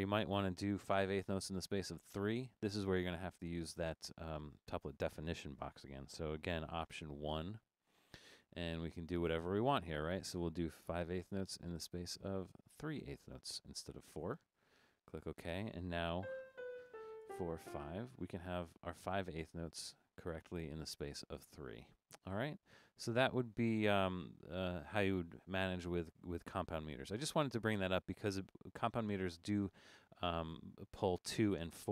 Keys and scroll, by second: 1.1-2.4 BackSpace, 7.4 alt+1, 11.0 5, 16.3-17.6 typing, 16.5 Down, 16.7 Down, 17.2 Down, 17.5 Down.